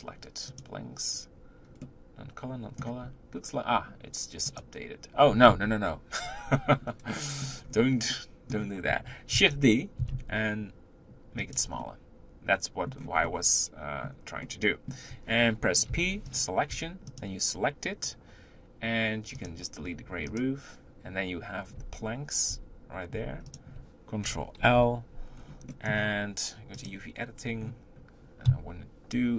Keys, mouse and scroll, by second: 26.8 click, 28.5 KP_1.